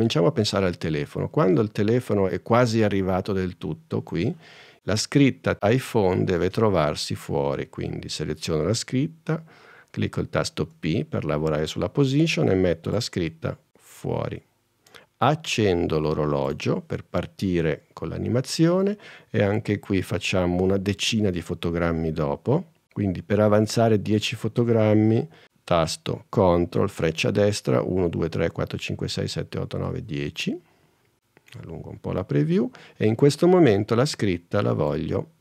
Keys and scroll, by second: 10.7 p, 27.8 super+Right.